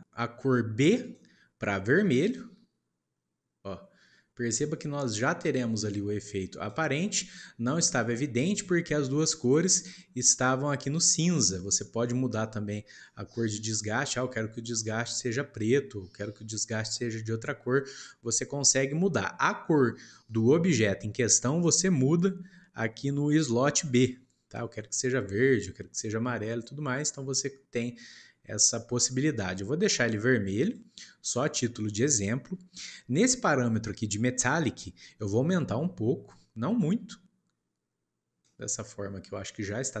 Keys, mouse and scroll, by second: 1.0 click, 9.3-11.7 scroll up 4, 11.7 click, 24.0 click, 31.8-33.6 middle drag, 33.6-34.3 scroll up 1, 34.3-35.3 middle drag, 35.3-38.4 drag, 38.8 middle click, 39.1-39.6 scroll up 1, 39.6 scroll down 1, 39.8-40.0 middle drag.